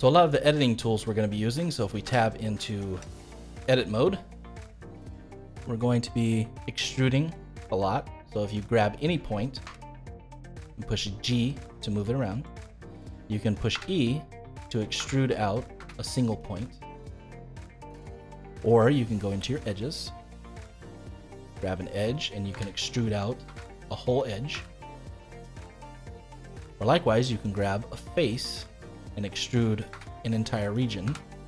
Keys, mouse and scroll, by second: 2.0 Tab, 2.7 click, 2.9 Tab, 3.5-3.8 scroll down 2, 3.8-6.0 middle drag, 6.0 click, 7.0 middle click, 7.5-8.5 scroll up 1, 8.5 click, 9.6 g, 13.7 e, 15.0 e, 15.7 e, 17.0-19.4 middle drag, 19.4-20.6 drag, 21.0 click, 21.7 middle click, 22.5 e, 23.4 e, 24.5 e, 27.3-28.3 drag, 28.6-29.9 middle drag, 29.9 e, 31.0 e.